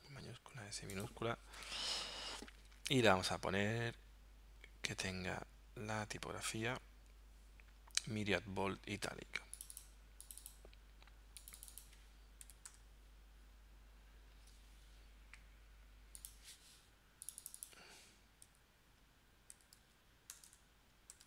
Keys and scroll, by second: 12.5 m, 12.7 y, 18.5 m, 19.8-21.2 typing.